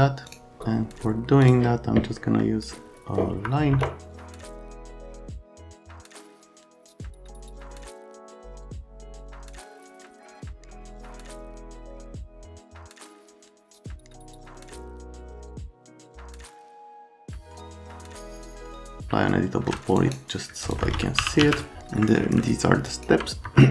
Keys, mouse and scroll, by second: 0.3 right click, 1.4 middle click, 2.2 right click, 3.3 F3, 3.7 F3, 12.0 click, 12.8 click, 16.1 F3, 18.2 w, 19.0 F3, 20.6 click, 20.9-21.9 typing, 23.5 F3.